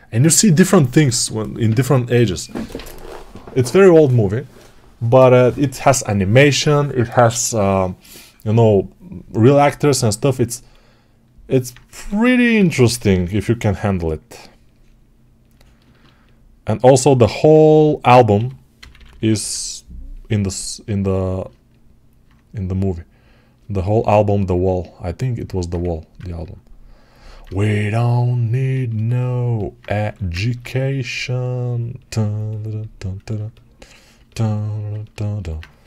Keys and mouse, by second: 10.4-11.6 alt+drag, 11.6 right click, 11.8 1, 12.4 [, 12.6 [, 18.2 g, 18.6-21.4 ], 21.4-28.4 alt+drag, 25.7 1, 29.9 3.